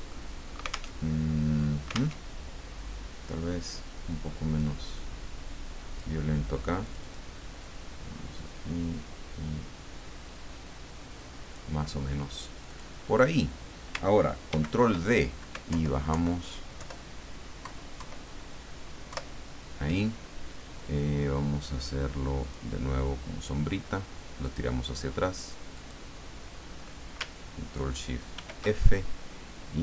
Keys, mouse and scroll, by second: 0.1 ctrl+click, 0.9 alt+Tab, 2.2 alt+Tab, 4.6-6.1 drag, 6.8 click, 7.6-11.8 drag, 12.6 click, 14.5 ctrl+d, 15.7 alt+Down, 17.6 alt+Left, 19.1 alt+Left, 22.4 click, 24.4 click, 25.7 click, 28.3 ctrl+shift+f.